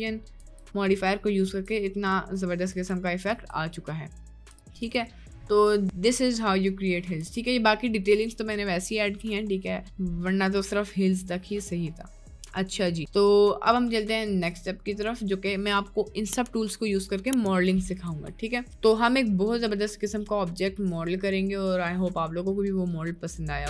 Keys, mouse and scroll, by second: 0.0 click, 0.4 Tab, 1.0 middle click, 1.6 Tab, 2.0 middle click, 2.7 Tab, 3.4 Tab, 3.8 middle click, 4.6 Tab, 4.6 middle click, 5.0 Tab, 5.2 middle click, 5.8 Tab, 6.0 middle click, 6.4 middle click, 7.3 Tab, 8.1 Tab, 9.4 middle click, 12.4-13.0 middle drag, 17.1 click, 18.1 Delete, 22.8 middle click.